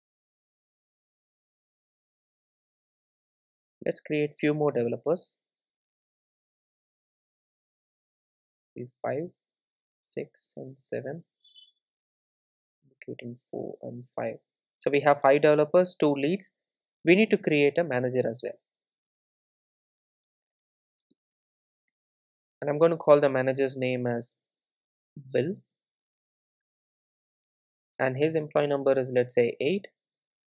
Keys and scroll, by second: 6.0 super+d, 18.1 Return.